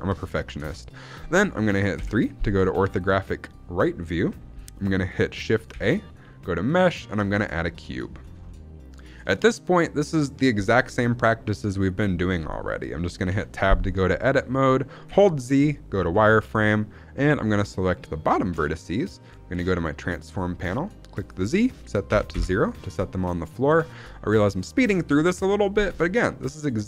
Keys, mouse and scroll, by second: 0.2 shift+middle drag, 1.9 scroll up 2, 1.9 KP_3, 2.7-3.4 shift+middle drag, 5.6 shift+a, 7.5 scroll down 1, 7.8 shift+middle drag, 8.1 scroll up 1, 8.4-9.1 shift+middle drag, 13.2 Tab, 15.0 z, 17.2 click, 21.1-22.8 drag, 23.4 shift+middle click.